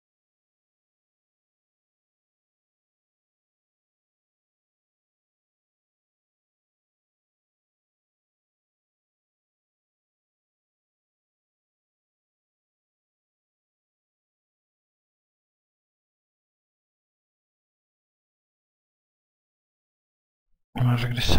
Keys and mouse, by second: 0.4 F2, 7.8 click, 9.4 F1, 10.1 alt+click, 15.5 alt+click, 20.1 ctrl+z.